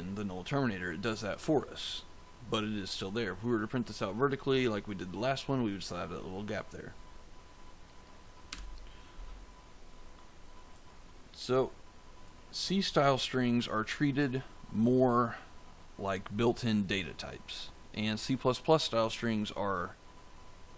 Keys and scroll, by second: 8.4 f.